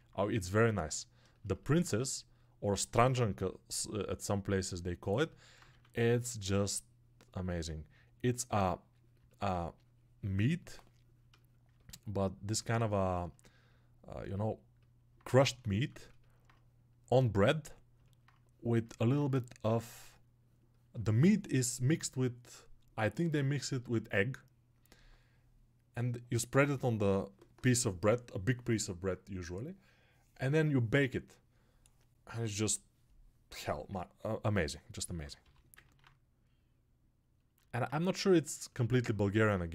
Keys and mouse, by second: 15.7 alt+shift+click, 34.9-39.0 alt+drag.